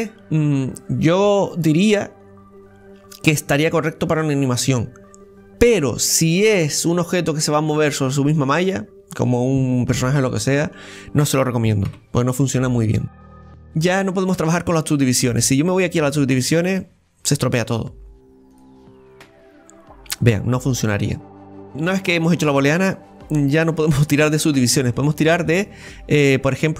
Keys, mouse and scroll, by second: 0.0-3.2 middle drag, 9.7-10.2 scroll up 1, 10.2-11.8 scroll up 1, 11.8 middle click, 12.4-12.8 scroll up 2, 12.8 middle click, 13.6 scroll up 1, 13.7-15.3 middle drag, 15.3 click, 15.9-19.1 drag, 21.3 click, 21.7-23.7 middle drag, 24.2-24.9 scroll down 1, 24.9 middle click, 25.8-26.6 scroll up 1, 26.6-26.7 scroll up 1.